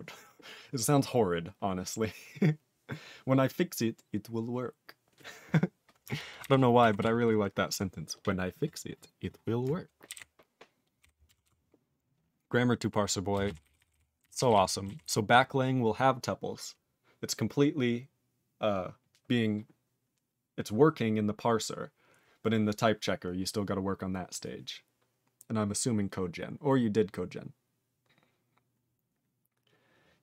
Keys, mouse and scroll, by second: 6.4 ctrl+g, 7.0 ctrl+s, 10.1 ctrl+b, 10.2 ctrl+n, 11.0 ctrl+n, 11.5 ctrl+s, 13.3 ctrl+space, 13.5 ctrl+e, 13.6 ctrl+n, 13.9 ctrl+n, 14.2 ctrl+g, 14.3 ctrl+e, 14.4 ctrl+n, 14.5 ctrl+n, 14.5 ctrl+e, 15.0 ctrl+s.